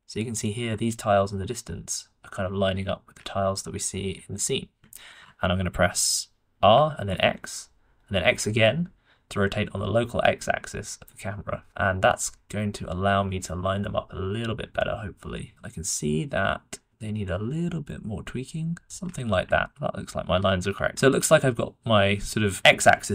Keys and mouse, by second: 3.5-3.9 shift+middle drag, 4.0-4.7 middle drag, 4.9 shift+click, 6.5 r, 19.6 shift+middle drag.